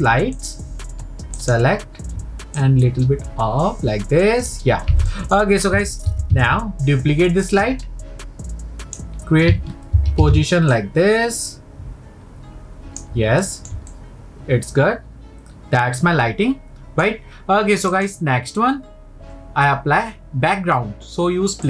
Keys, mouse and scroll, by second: 0.4 shift+click, 1.4 shift+click, 2.6 click, 5.1-6.1 middle drag, 7.5 click, 10.5 ctrl+v, 10.7 click, 13.4-17.0 middle drag, 17.9-21.0 drag.